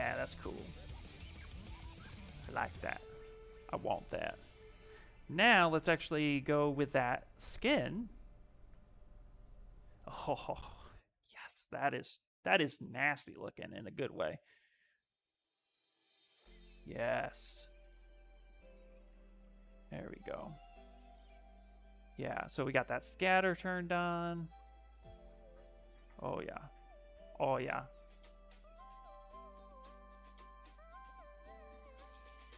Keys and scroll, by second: 7.3 s, 14.1 s.